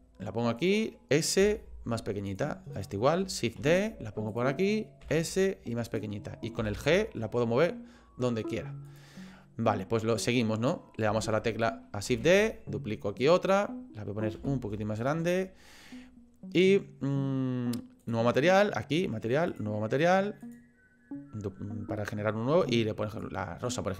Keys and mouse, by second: 1.4 s, 2.7 click, 3.6 shift+d, 5.0 s, 6.6 g, 12.1 shift+d, 14.3 s, 18.0 click, 19.5 click.